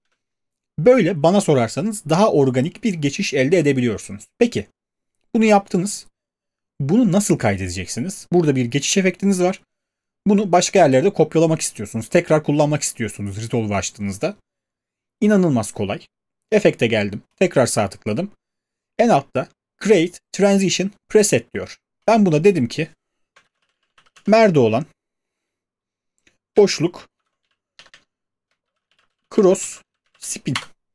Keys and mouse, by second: 0.1 space, 29.8-30.7 typing.